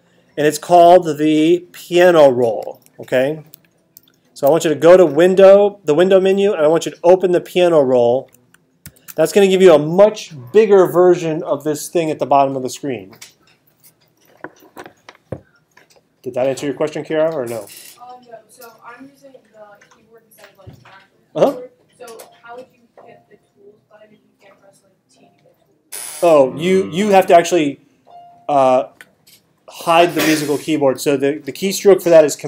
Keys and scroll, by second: 4.0 alt+super+8, 8.9 alt+super+8.